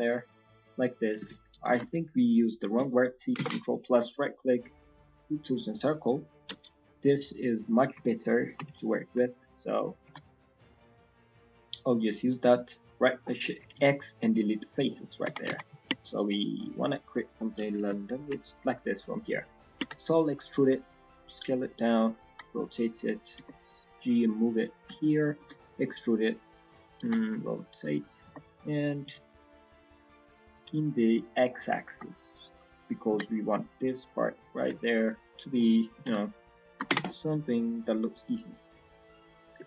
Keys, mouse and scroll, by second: 1.8 middle click, 2.4 click, 3.3 ctrl+KP_Add, 4.1 right click, 6.5 KP_1, 7.0 scroll up 1, 8.9 scroll down 2, 9.3 shift+middle click, 10.0 g, 13.7 x, 14.8 middle click, 15.2 Tab, 15.9 alt+click, 16.2 middle click, 17.1-17.6 scroll down 3, 17.6 KP_1, 17.8 KP_3, 18.1 KP_1, 18.4-18.9 scroll up 1, 24.9 shift+middle click, 25.4 e, 26.9 r, 35.3 alt+click, 35.9 s, 36.8 Tab, 37.0 middle click, 37.5 right click, 38.7-39.2 scroll down 3, 39.0 middle click, 39.6 Tab.